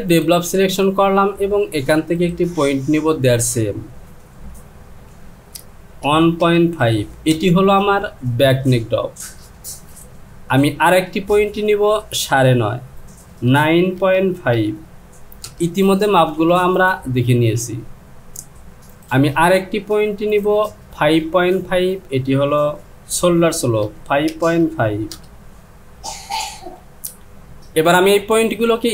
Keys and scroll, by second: 4.9 Down, 6.1 KP_1, 6.4 KP_Decimal, 6.8 KP_5, 7.3 Return, 11.7 Down, 13.5 KP_9, 14.0 KP_Decimal, 14.6 KP_5, 15.5 Return, 21.3 Down, 23.9 KP_5, 24.3 KP_Decimal, 24.6 KP_5, 25.1 Return.